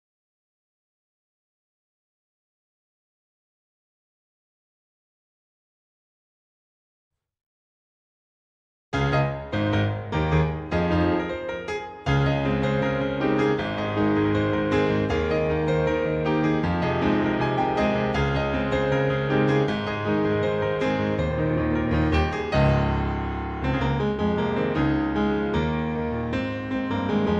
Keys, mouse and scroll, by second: 1.4-1.7 scroll down 2, 1.7 middle click, 2.5 middle click, 2.9-3.3 scroll down 1, 3.7-4.2 scroll up 1, 4.2 middle click, 4.6-5.1 scroll up 1, 5.1 middle click, 9.1-10.0 scroll down 3, 10.2 scroll down 2, 10.4 shift+middle click, 11.2-11.6 scroll down 1, 11.6 middle click, 12.3 middle click, 14.1 scroll up 2, 14.4 shift+middle click, 14.8-15.4 scroll up 5, 15.6 middle click, 16.4 middle click, 17.5-17.9 scroll down 2, 17.9 middle click, 18.2 middle click, 18.7 scroll down 1, 18.9 middle click, 21.5 shift+middle click, 22.3 middle click, 23.2 click, 24.7 click, 25.4 scroll down 2, 25.8 shift+middle click.